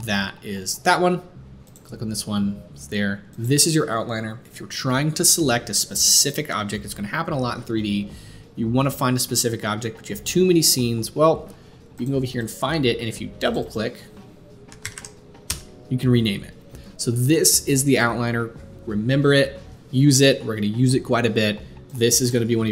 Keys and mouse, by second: 0.0-1.6 middle drag, 1.6 click, 1.7-3.4 middle drag, 3.4-6.8 drag, 6.8-11.9 middle drag, 11.9 click, 12.0-13.6 middle drag, 13.6-21.9 drag, 21.9 middle click, 22.2 click.